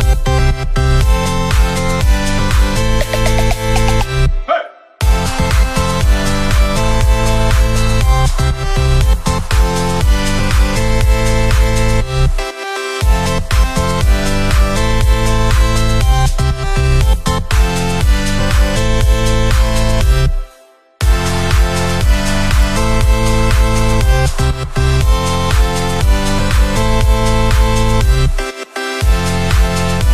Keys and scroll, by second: 2.6 ctrl+[, 2.7 Down, 4.2 ctrl+[, 4.6 Up, 6.1 Down, 7.6 ctrl+[, 7.8 Down, 8.3 ctrl+-, 20.3 ctrl+=, 23.1 Left, 26.0 Up, 29.7 Right.